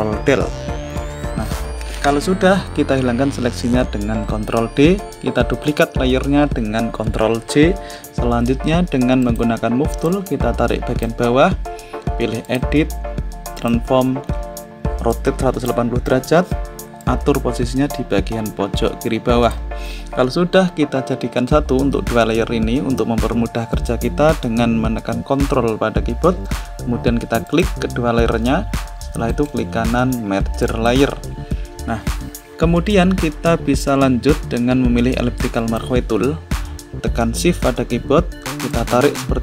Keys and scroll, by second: 4.2 ctrl+d, 6.9 ctrl+j.